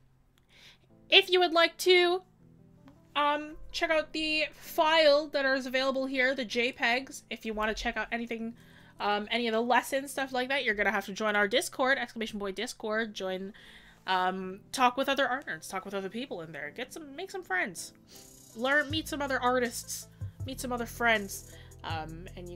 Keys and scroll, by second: 4.0 scroll up 1, 4.6 scroll down 1, 6.1 scroll up 1.